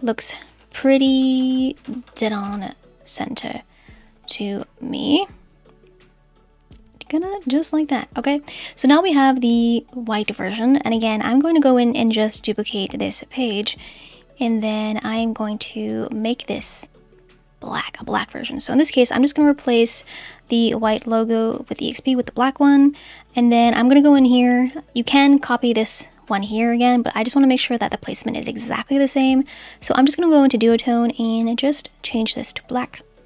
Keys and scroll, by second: 0.9 Left, 1.8 Left, 2.4 Left.